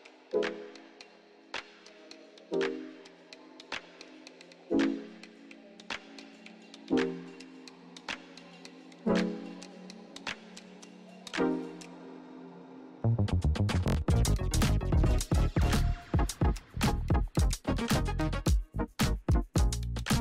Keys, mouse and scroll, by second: 1.5 scroll down 1, 2.4-2.8 scroll up 1, 2.8-4.1 scroll down 1, 4.1-7.2 drag, 8.6 ctrl+z, 9.8 click, 12.4 click, 14.6 click, 15.7 ctrl+d, 17.1 click.